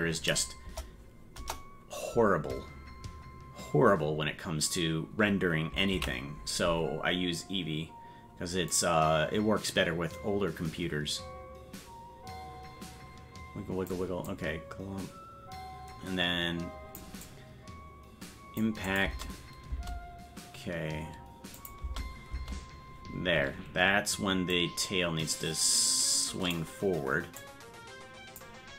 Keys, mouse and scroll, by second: 0.6 KP_0, 3.2-4.3 scroll up 1, 4.3-5.7 scroll down 1, 6.1 ctrl+s, 8.7-13.9 drag, 14.3-17.0 drag, 17.3-18.6 drag, 18.9 click, 19.9 space, 21.6 click, 21.8 space, 24.5-26.5 drag, 27.4-28.4 drag.